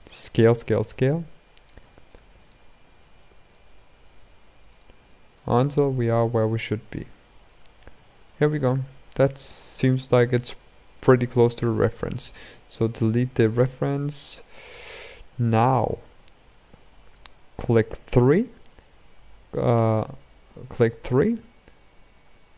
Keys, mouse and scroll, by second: 1.8-3.1 middle drag, 3.1 click, 4.8-5.9 middle drag, 5.9 click, 8.3-9.1 scroll down 7, 9.1-9.5 scroll up 4, 10.1-11.1 scroll down 6, 11.1 Tab, 11.7 click, 12.4 x, 14.2-15.7 middle drag, 15.7 scroll up 2, 15.9 Tab, 16.5-17.6 shift+middle drag, 17.6 3, 18.4 click, 19.2 Tab, 19.7 click, 20.2 3, 20.7 click.